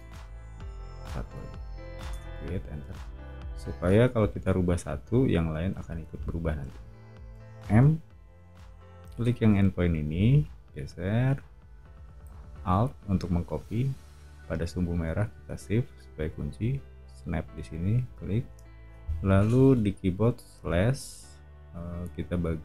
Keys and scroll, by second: 0.0 BackSpace, 1.2 1, 2.1 Return, 3.5 o, 7.3 m, 20.5 /.